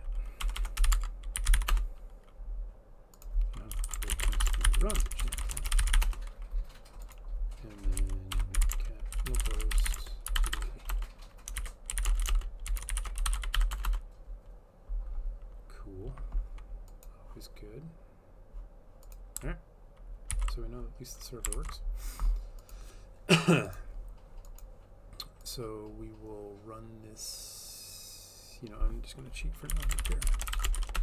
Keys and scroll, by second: 0.0-2.1 typing, 3.5-13.9 typing, 20.4 ctrl+c, 21.6 ctrl+c, 29.5-31.0 typing.